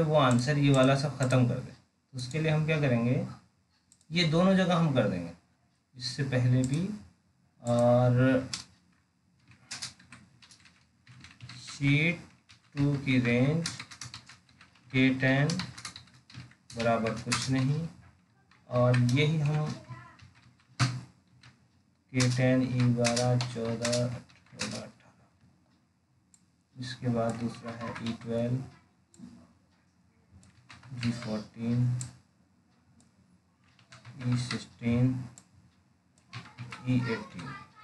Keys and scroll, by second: 20.5 ctrl+c, 21.7 ctrl+v.